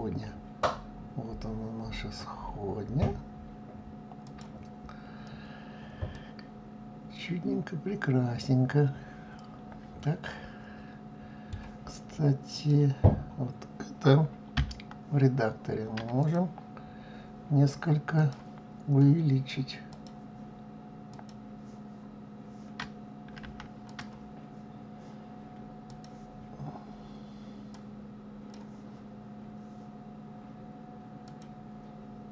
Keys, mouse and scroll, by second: 4.2-5.0 scroll up 6, 5.7-8.9 middle drag, 12.1 click, 14.2 Tab, 15.8 click, 17.8 click, 19.5 click, 20.6 click, 23.5 click, 25.5 click, 27.3-30.3 drag, 30.8 click, 32.2 click.